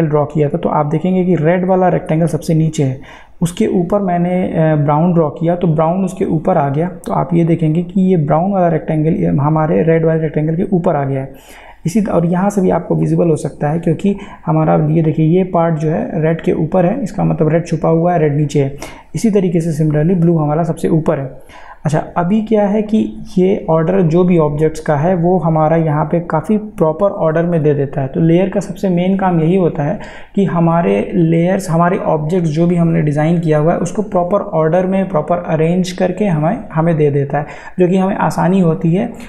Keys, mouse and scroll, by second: 4.9 click, 7.9 click, 13.0 click, 20.1 click, 24.1 click.